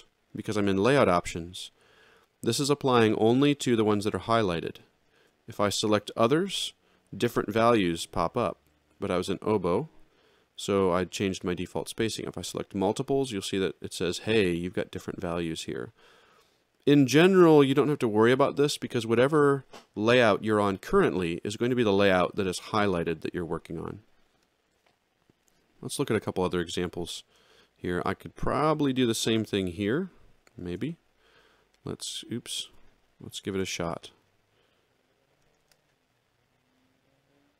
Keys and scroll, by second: 26.4 alt+shift+], 30.6 ctrl+shift+n, 32.7 Escape, 33.5 ctrl+shift+l.